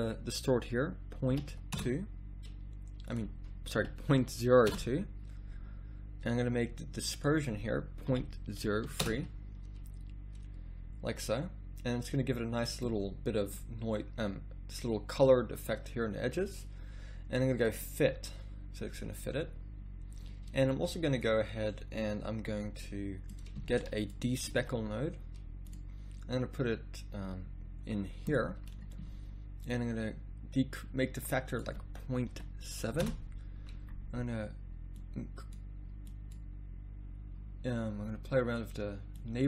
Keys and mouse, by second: 25.8 a.